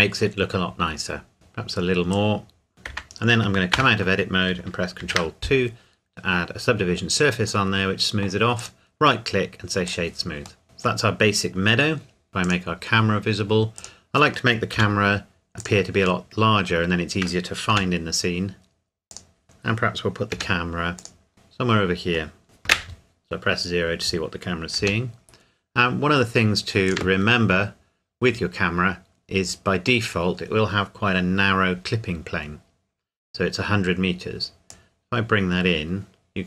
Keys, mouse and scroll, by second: 2.1 click, 2.7 ctrl+2, 3.7 Tab, 5.0 ctrl+2, 8.6 right click, 9.9 click, 10.6 middle click, 12.3 click, 14.7 s, 15.6 click, 16.3 middle click, 17.7 g, 19.1 click, 19.4-20.3 scroll up 1, 20.3 g, 21.0 click, 21.4 middle click, 22.4 click, 22.7 KP_0, 24.8 g, 26.9 Escape, 34.7 click.